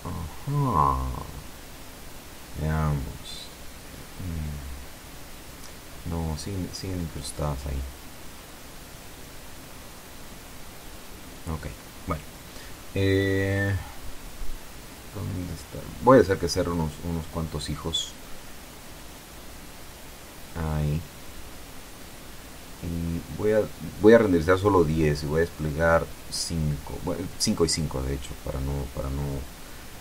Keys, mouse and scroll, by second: 1.1 F12, 14.6-15.5 scroll down 2, 15.5 click, 17.1 Escape, 18.3-19.5 scroll down 4, 19.9 click, 23.1 click, 25.7 5, 26.1 shift+Tab, 26.5 shift+KP_5, 29.7-30.0 middle drag.